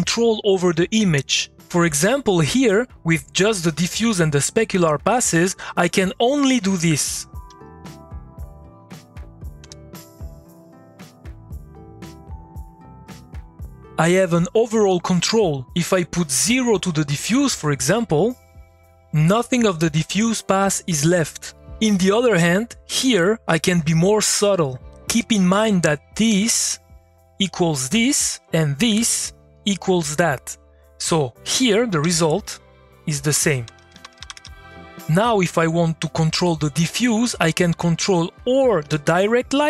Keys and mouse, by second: 6.6 click, 8.6 click, 9.6 Return, 11.2-17.4 drag, 18.3 click, 31.2 click, 32.0 2, 33.1-34.9 typing, 38.0 click, 38.8 Return.